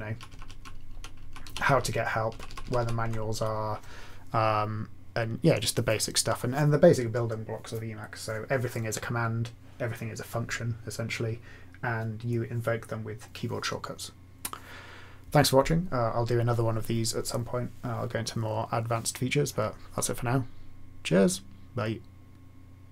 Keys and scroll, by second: 0.3 Left, 0.4 Left, 0.6 ctrl+Down, 1.2 Left, 1.4 ctrl+Down, 2.3 ctrl+Up.